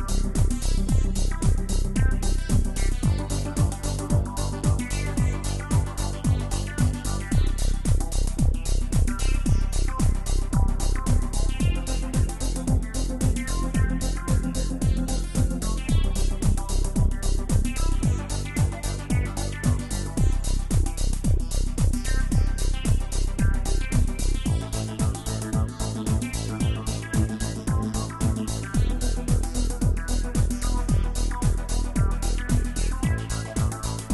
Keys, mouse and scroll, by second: 8.8 f, 10.2-12.6 drag, 12.6-14.1 middle drag, 14.1-17.7 drag, 17.7 middle click, 18.4-23.5 drag, 24.3 click, 24.5-27.6 drag, 32.1-33.4 drag, 33.4-34.1 middle drag.